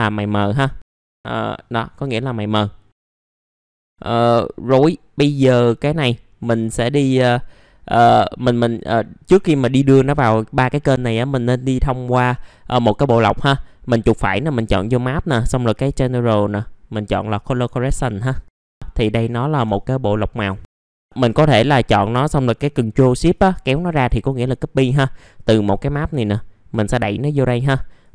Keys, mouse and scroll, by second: 3.1 click, 3.7 middle click, 3.8 click, 12.3-13.4 right drag, 14.4 click, 19.7 ctrl+shift+click, 20.9 click, 23.3 click, 26.1-28.1 drag.